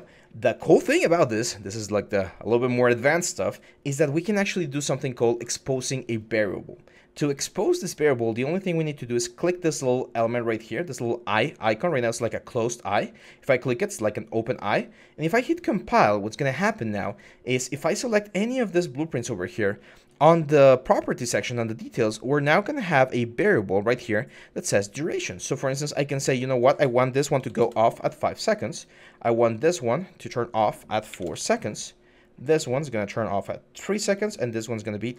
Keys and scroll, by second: 27.2 5, 27.4 Return, 30.9 4, 31.0 Return.